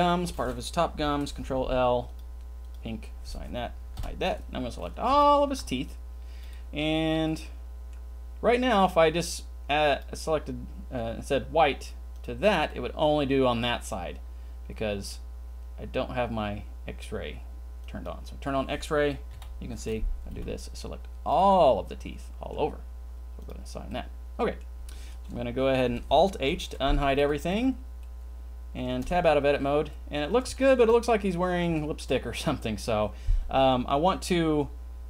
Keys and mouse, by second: 0.0 shift+click, 1.1 ctrl+l, 2.0 click, 2.6 click, 4.0 h, 5.2 c, 7.2 click, 9.9 click, 12.6-15.1 middle drag, 18.0 click, 19.3 KP_3, 20.4 c, 21.2 middle click, 21.5-22.5 middle drag, 23.4 middle click, 23.9 middle click, 26.3 alt+h, 27.2 a, 27.5 a, 28.0 middle click, 28.7 click, 29.1 Tab, 29.3 middle click, 29.6 middle click, 29.8 middle click, 29.9 click, 30.1-30.7 middle drag, 30.9-31.2 middle drag, 31.6-32.1 shift+middle drag, 32.4 middle click, 32.6 middle drag, 32.9 click, 33.0 middle click, 33.2 click, 33.3 middle click.